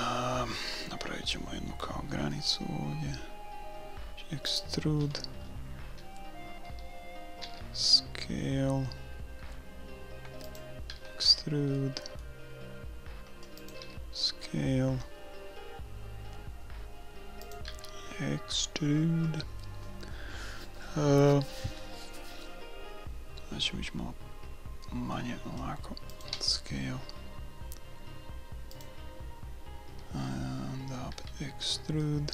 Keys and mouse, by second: 1.3 e, 5.0-7.4 middle drag, 7.4 s, 10.9 e, 13.8 s, 17.7 e, 26.3 s, 29.4-31.4 middle drag, 31.1 e.